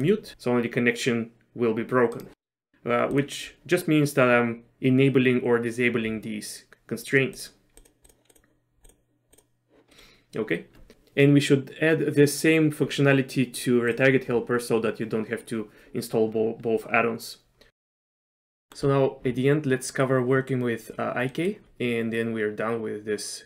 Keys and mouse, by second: 0.3 r, 3.2 click, 7.4 click, 7.8 click, 8.1 click, 8.3 click, 9.4 click, 10.0 middle click, 18.5 middle click, 18.7 shift+middle click, 21.4 middle click.